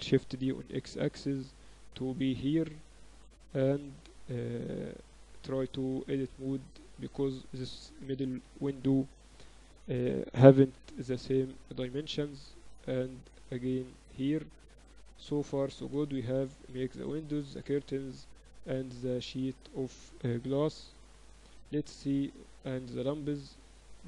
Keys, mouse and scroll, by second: 0.2 shift+d, 3.6 Tab, 5.0-6.7 drag, 6.8 Tab, 9.8 right click, 10.6 shift+d, 14.4 ctrl+s, 15.2-18.9 typing.